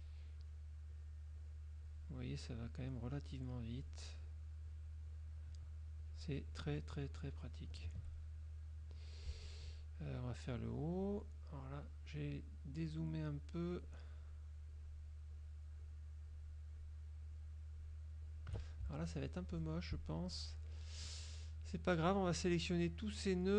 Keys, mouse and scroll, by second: 0.5 shift+click, 1.0 shift+click, 1.5 shift+click, 2.0 shift+click, 2.5 shift+click, 3.0 shift+click, 4.4 shift+click, 6.1 shift+click, 6.6 shift+click, 7.8 shift+right click, 8.6 click, 10.6 shift+click, 11.7 shift+click, 12.4 shift+click, 12.8 shift+click, 13.5 shift+click, 14.8 shift+click, 15.4 shift+click, 15.9 shift+click, 16.4 shift+click, 16.8 shift+click, 17.8 shift+click, 18.9 shift+z, 19.6 click, 20.3 F2, 20.6 click, 22.2-23.5 drag.